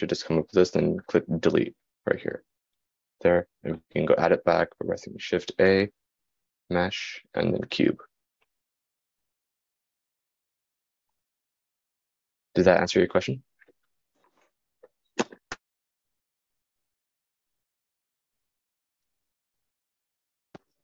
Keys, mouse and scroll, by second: 9.1 shift+a.